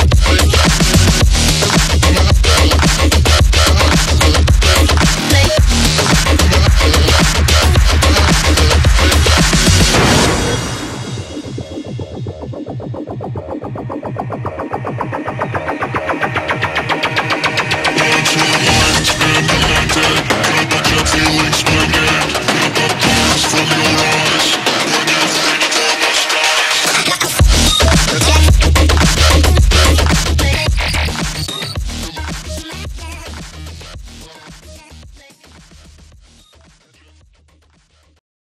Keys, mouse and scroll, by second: 4.4 right click, 5.2 click, 5.9 click, 8.5 click, 10.8 ctrl+-, 11.4 space, 13.0-13.5 click, 19.3-22.0 drag, 28.4 right click, 29.2 click, 30.5 space, 31.3-31.8 drag, 33.9 alt+click, 35.1 ctrl+=, 35.7 click, 36.0-36.5 space, 36.8-37.2 click, 37.1 space, 37.5 click.